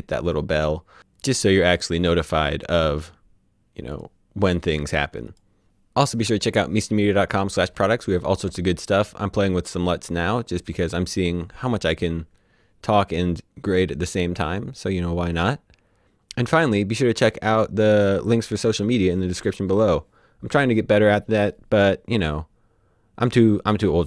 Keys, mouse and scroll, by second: 3.0 click, 3.5 click, 4.0 click, 4.7 click, 5.4-6.4 typing, 7.3 right click.